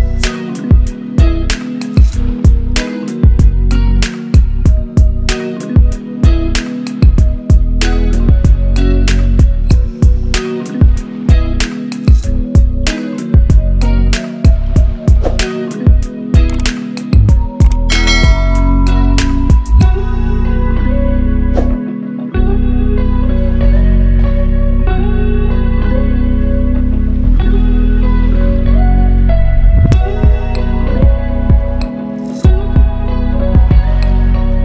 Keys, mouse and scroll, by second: 5.3 shift+F2, 5.3 b, 6.0-6.3 drag, 15.5 click, 17.8 click, 18.3 ctrl+c, 18.5 click, 19.1 t, 19.3 click, 20.6 ctrl+v, 22.4 ctrl+v, 23.3 click, 23.4 click, 24.5-24.8 scroll down 1, 26.1 click, 27.6 ctrl+a, 30.7 click, 31.9 ctrl+d, 32.5-34.6 drag.